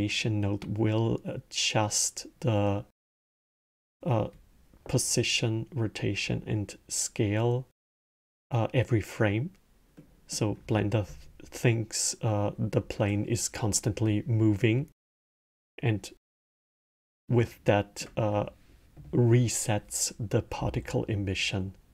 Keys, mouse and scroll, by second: 9.8-12.8 middle drag, 16.3-20.6 middle drag.